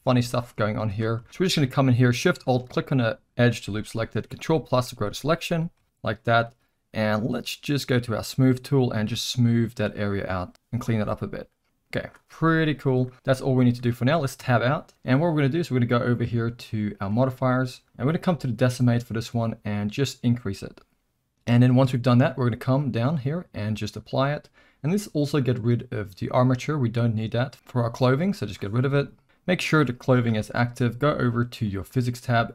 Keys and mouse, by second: 1.3 alt+a, 1.3 z, 2.3 shift+click, 4.3 ctrl+KP_Add, 8.3 click, 9.1-10.5 drag, 11.6 click, 13.0-13.6 middle drag, 14.4 Tab, 16.9 click, 20.5 click, 22.8-23.9 drag, 28.4 click, 29.1 alt+a, 29.4 click, 31.7 click.